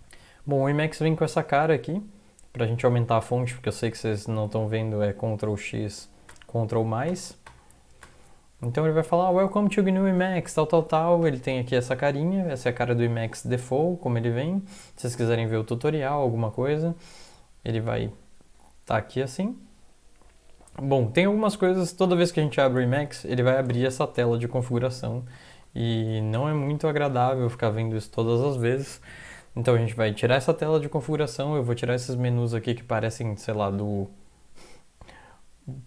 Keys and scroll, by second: 1.3 super+Up, 4.7 ctrl+x, 6.3 ctrl+=, 7.1 ctrl+=, 7.5 ctrl+=, 8.0 ctrl+=, 22.9 alt+F4, 23.4 Up, 23.7 Return, 25.6 super+Up, 26.1 ctrl+x, 26.3 ctrl+=, 26.5 ctrl+=, 26.7 ctrl+=, 26.9 ctrl+=, 27.2 ctrl+=.